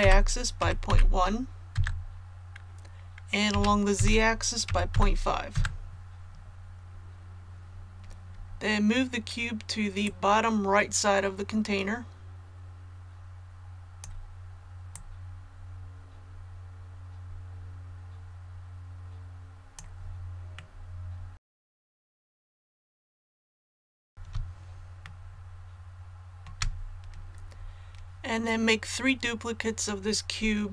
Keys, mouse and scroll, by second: 0.0 y, 0.6 KP_Decimal, 0.9 KP_1, 3.5 s, 3.9 z, 4.6 KP_Decimal, 4.9 KP_5, 10.0-20.4 drag, 20.5 middle click, 21.4 KP_3, 21.6 click, 22.0 middle click, 22.3 click, 22.7 KP_1, 23.1 middle click, 23.3 click, 24.0 KP_1, 25.0 shift+middle click.